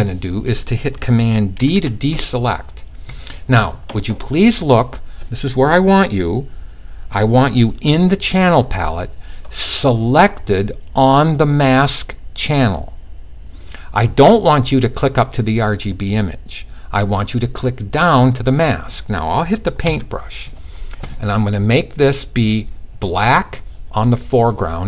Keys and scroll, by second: 1.2 super+d, 19.3 b.